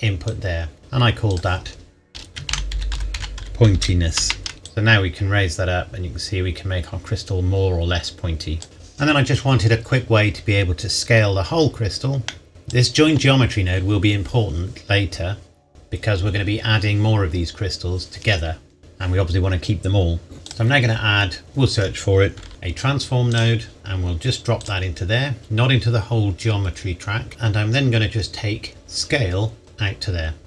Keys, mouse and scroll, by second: 2.4-4.2 typing, 4.6 KP_Enter, 4.6 click, 11.0-11.7 scroll down 1, 11.7-12.2 scroll up 1, 12.2 middle click, 12.5 click, 20.4 click, 22.5 typing, 24.1 click, 26.3 click, 27.3 scroll down 1, 28.7 click.